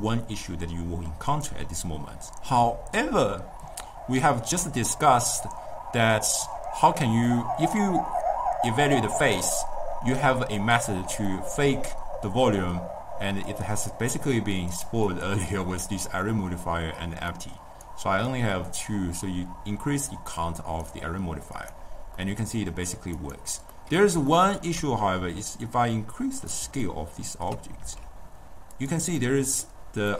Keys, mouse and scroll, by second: 7.3-10.4 middle drag, 11.1 scroll up 2, 11.3 scroll down 2, 11.4-13.5 middle drag, 13.5 click, 14.6 click, 15.1 click, 17.4-21.5 drag, 21.7 click, 22.3-23.3 middle drag, 23.3 click, 23.8-25.3 middle drag, 25.3 s, 26.9-27.9 ctrl+middle drag, 27.9 s, 29.3-30.1 middle drag, 30.1 scroll up 1.